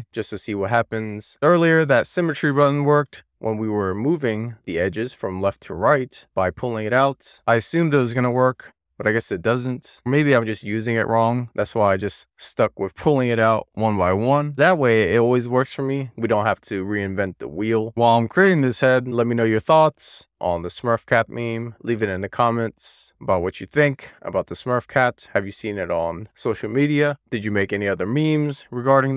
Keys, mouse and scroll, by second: 0.4 click, 1.7 super+z, 2.9 click, 3.5-5.7 middle drag, 6.5-16.2 middle drag, 17.7-21.1 middle drag, 21.4-23.0 middle drag, 23.2 shift+middle click, 23.7-25.8 middle drag, 27.2-29.1 middle drag.